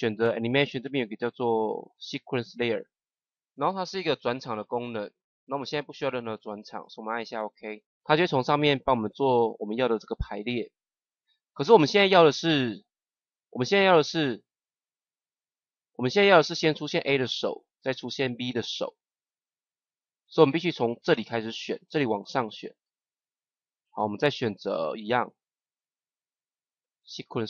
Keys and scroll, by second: 11.5 ctrl+z.